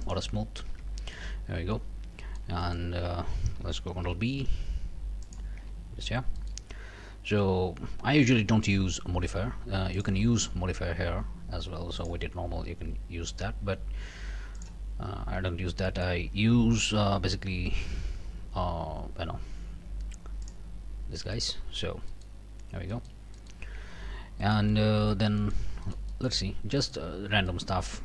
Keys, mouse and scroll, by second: 0.0 middle click, 0.7 Tab, 1.0 middle click, 1.7 scroll up 2, 2.2 shift+middle click, 2.6 shift+middle click, 3.0 shift+scroll down 2, 4.0 ctrl+b, 5.2 click, 5.6 Tab, 5.9-6.4 scroll up 2, 6.4 click, 7.3 Tab, 7.6 scroll down 2, 8.0 a, 9.3 Tab, 9.9 click, 12.0 click, 14.5 click, 15.4 Tab, 15.8 click, 17.6 q, 20.4 click, 20.9 middle click, 21.2 middle click, 21.3 click, 21.8 scroll down 1, 22.1 middle click, 22.5 scroll up 1, 22.9 shift+middle click, 23.2 shift+scroll up 1, 23.3 shift+middle click, 23.8 shift+Tab, 24.1 shift+scroll down 1, 24.4 middle click, 24.7 scroll up 1, 25.1 Tab, 25.4 click, 25.8 shift+click, 26.5 shift+scroll up 1, 26.8 click, 27.1 scroll down 1, 27.5 click.